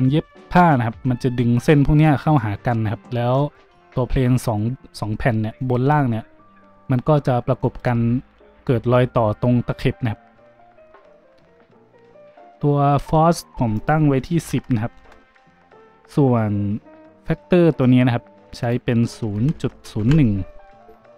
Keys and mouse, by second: 13.8-21.1 drag.